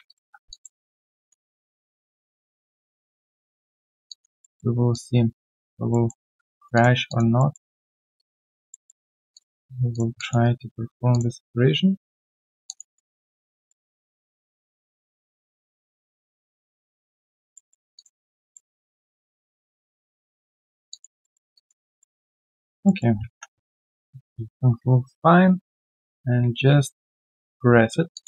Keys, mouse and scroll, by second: 0.0 shift+click, 0.5 alt+click, 0.8 alt+middle click, 1.1 alt+click, 1.7 shift+click, 4.0 alt+click, 4.4 alt+middle click, 4.9 shift+click, 5.9 alt+middle click, 6.5 shift+click, 6.7 shift+double click, 7.0 alt+double click, 7.3 alt+middle click, 8.1 shift+click, 8.7 alt+middle click, 10.1 alt+click, 11.1 shift+click, 12.6 alt+click, 12.8 alt+double click, 13.0 alt+right click, 13.3 alt+click, 13.5 alt+middle click, 14.9 shift+click, 17.5 alt+middle click, 17.9 shift+click, 18.1 shift+double click, 18.5 alt+double middle click, 19.4 alt+click, 20.0 shift+click, 20.9 alt+click, 21.8 alt+middle click, 22.1 alt+click, 22.5 alt+scroll down 1, 22.8 alt+middle click, 23.1 scroll down 2, 23.8-24.5 typing, 27.2 ctrl+b, 28.1 alt+click.